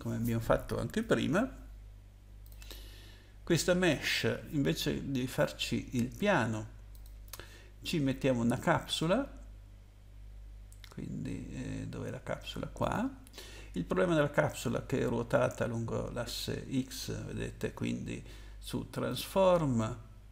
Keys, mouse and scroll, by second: 2.4 click, 3.9 click, 6.9 click, 12.8 click, 19.1 click.